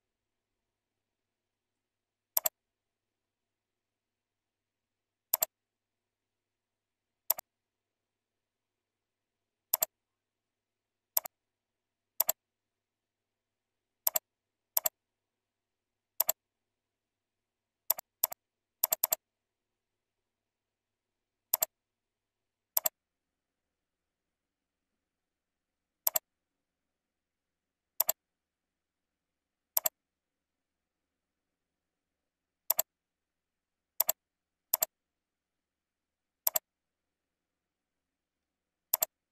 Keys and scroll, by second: 3.8 ctrl+Left, 11.8 ctrl+x, 12.4 ctrl+v, 13.5 ctrl+r, 20.6 ctrl+b, 22.3 ctrl+z, 28.3 ctrl+v.